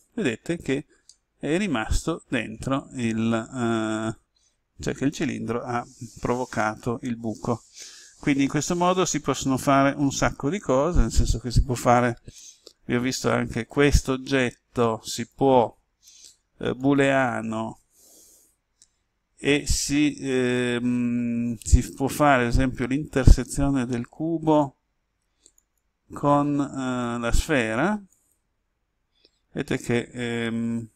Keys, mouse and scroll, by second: 1.1-10.7 middle drag, 13.5 right click, 15.1 click.